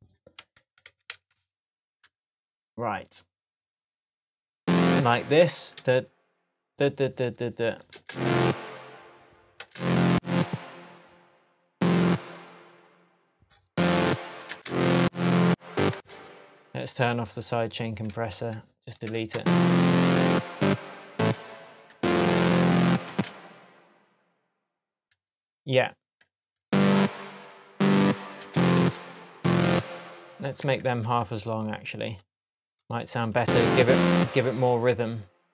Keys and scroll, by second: 0.6 super+z, 5.4 super+d, 7.9 super+space, 9.6 space, 12.7 BackSpace, 14.3 super+d, 14.5 super+space, 15.4 space, 19.1 BackSpace, 19.3 space, 21.2 space, 23.1 space, 28.1 super+d, 28.4 super+space, 31.0 BackSpace.